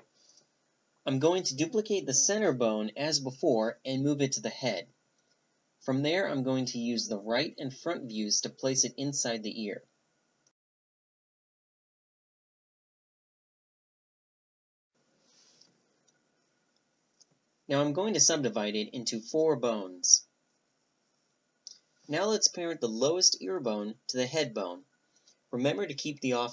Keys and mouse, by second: 3.3 Tab, 3.6-4.8 right drag, 4.8 click, 5.0 shift+d, 6.4 alt+p, 7.3 click, 7.5-8.9 middle drag, 8.2 r, 9.8 g, 10.5 middle click, 12.6 middle click, 14.4-15.6 drag, 15.8 click, 17.1 w, 17.8 click, 18.1 w, 19.0 a, 19.4 g, 21.7-22.8 middle drag, 24.6 ctrl+p.